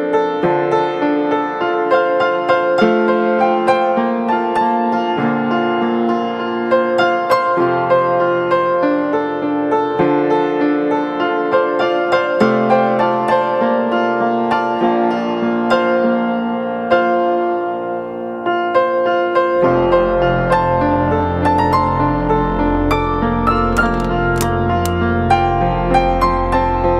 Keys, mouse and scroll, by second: 13.7 e.